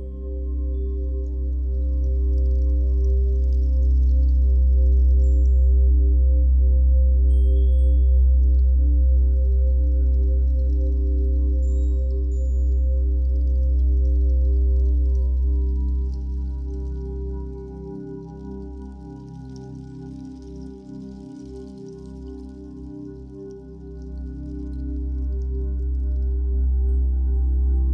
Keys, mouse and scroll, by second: 0.8 f, 1.4 click, 2.8 f, 3.7-9.7 drag, 8.5 ctrl+z, 10.6-16.8 drag, 15.9 f, 17.5-19.9 drag, 19.9-21.2 middle drag, 21.2-27.9 drag.